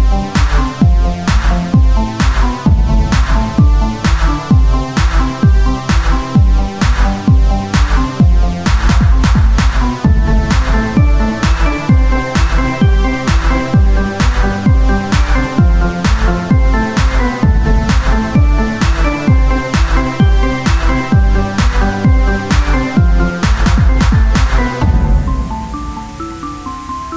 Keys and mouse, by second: 0.1 click, 0.3 ctrl+z, 0.9 o, 1.5 a, 2.7 ctrl+z, 4.0 s, 4.8-6.2 drag, 8.0-9.3 drag, 9.3-12.3 right drag, 10.6-13.9 drag, 12.3 Tab, 13.9 KP_3, 14.4 Tab, 14.8-16.3 drag, 15.3 z, 15.3 c, 16.9 e, 18.7 z, 21.5 e, 22.7 s, 23.9-25.0 drag, 24.6 o, 25.9-27.1 drag.